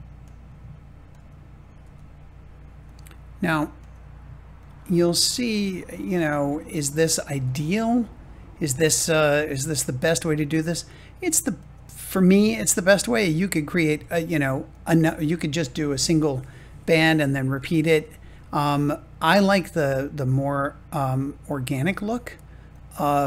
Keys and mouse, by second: 0.1-1.1 drag, 1.7 g, 2.8-3.8 drag, 4.7 g, 7.3 g, 10.7 click, 11.9 g, 12.9 click, 13.8 g, 14.6-16.8 drag, 21.9 g, 22.6-23.2 drag.